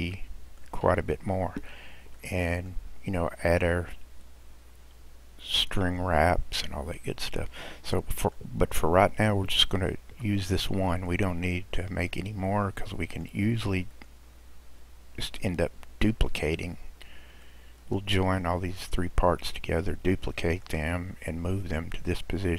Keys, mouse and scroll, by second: 0.1-1.7 middle drag, 1.7-2.2 scroll down 1, 2.2-5.3 middle drag, 6.7-7.2 scroll down 1, 7.2-7.6 scroll down 1, 7.6-10.1 middle drag, 10.1 Tab, 11.0 drag, 12.4-13.9 middle drag, 13.9 click, 17.5-22.0 middle drag, 22.0 click.